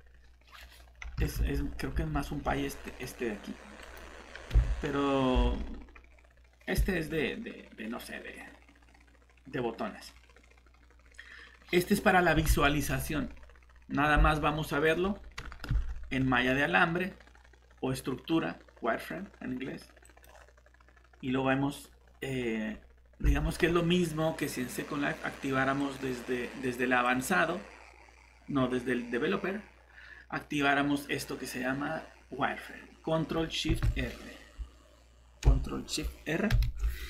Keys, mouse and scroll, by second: 1.3 alt+Tab, 1.9 Tab, 2.8 right click, 4.5 Escape, 5.5 alt+Tab, 12.3 Escape, 15.7 z, 20.0 click, 22.0-22.3 scroll down 1, 22.3-23.2 scroll up 1, 23.3 alt+Tab, 25.8 click, 33.7 Escape, 36.6 ctrl+shift+r.